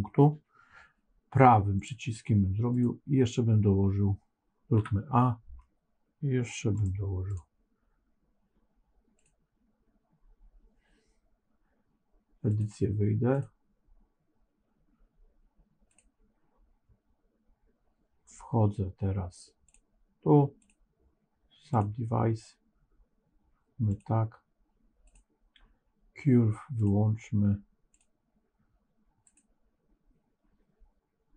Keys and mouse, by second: 1.7-2.7 right drag, 4.7 a, 6.7 right click, 9.1 click, 12.4 click, 20.6-21.7 drag, 23.8 click, 26.6-28.3 drag, 29.1 click.